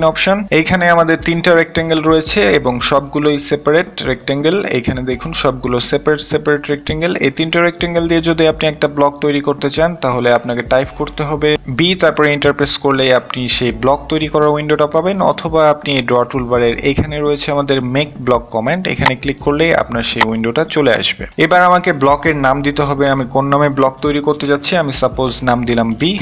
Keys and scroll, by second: 25.5 b.